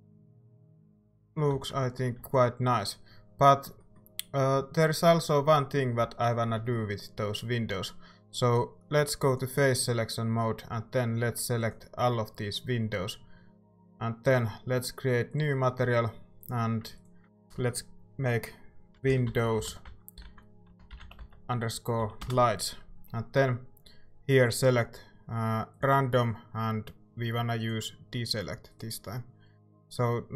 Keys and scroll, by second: 1.5 z, 2.2 ctrl+s, 5.1 Tab, 6.0 a, 18.7-22.0 typing, 22.2 Return.